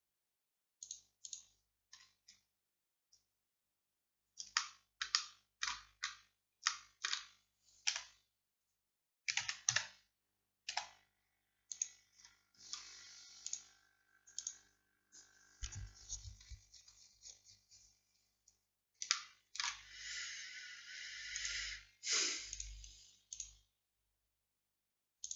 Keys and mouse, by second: 7.9 r, 10.8 g.